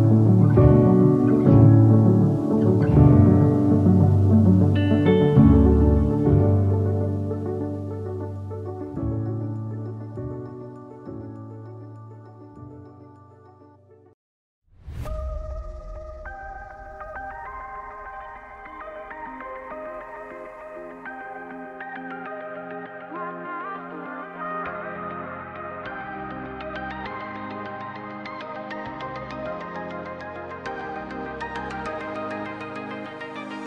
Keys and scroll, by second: 0.1 ctrl+t, 10.5 ctrl+t, 14.1 Return, 26.6 5, 31.8 v.